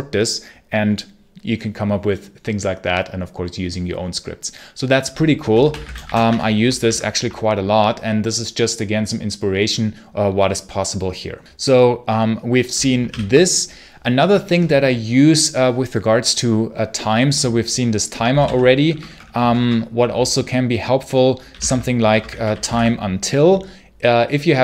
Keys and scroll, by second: 5.3-6.4 typing, 6.7 ctrl+q, 13.0 ctrl+l, 17.9-18.8 typing, 21.1-23.0 typing.